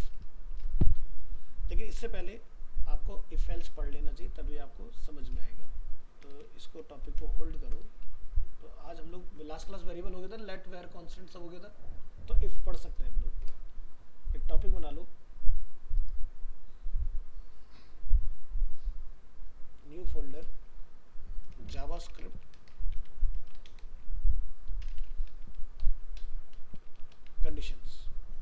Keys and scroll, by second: 8.6 ctrl+s.